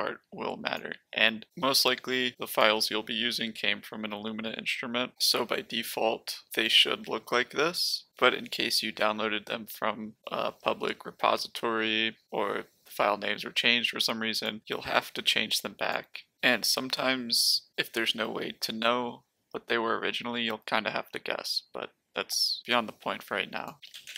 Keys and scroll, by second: 23.6-24.1 typing.